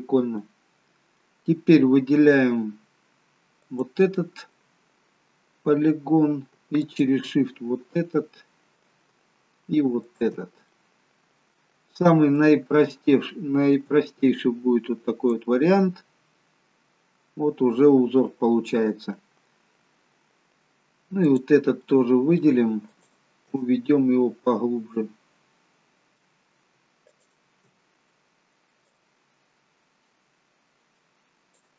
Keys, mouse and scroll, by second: 0.5 middle click, 3.7 click, 4.7 middle click, 6.9 shift+click, 7.6 middle click, 10.2 shift+click, 10.8 middle click, 12.5 click, 15.9 middle click, 21.4 click, 22.0 middle click, 23.0 shift+click, 23.7 middle click, 27.2 shift+click, 27.9-29.0 scroll down 1, 29.0 click, 29.0-30.2 scroll down 1.